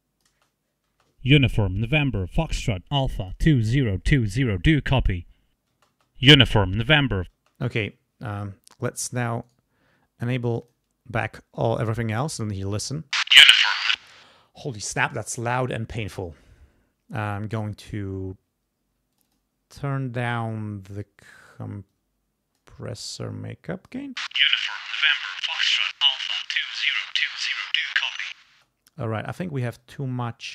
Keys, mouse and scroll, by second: 0.3 space, 2.5 click, 4.0-4.7 scroll up 4, 5.3 scroll up 2, 5.7 space, 6.7 scroll down 2, 7.3 space, 9.4 right click, 10.6 click, 13.0 space, 14.0 space, 15.5 click, 19.1 click, 21.9 click, 23.1 click, 24.0 space, 26.2 click, 28.5 space, 29.8 click.